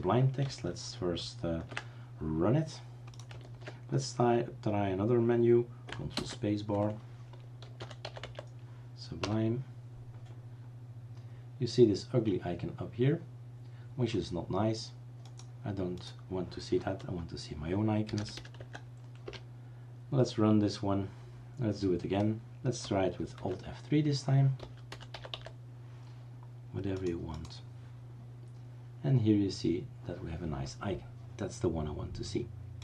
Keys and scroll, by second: 6.2 ctrl+space, 7.4-8.7 typing, 9.2 Return, 18.0-18.9 typing, 19.2 Return, 23.4 alt+F3, 24.4-25.8 typing.